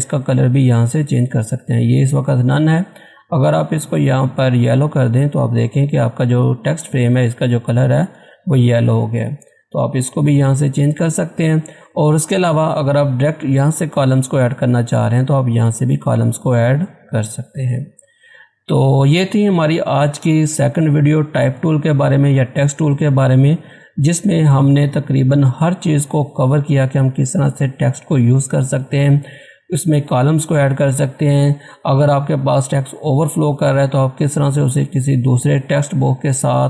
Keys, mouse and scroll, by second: 0.7 click, 4.3 click, 8.8 click, 11.3 click, 14.4 click, 14.6 click, 18.8 scroll down 1, 19.8 scroll up 1, 23.7 scroll up 1.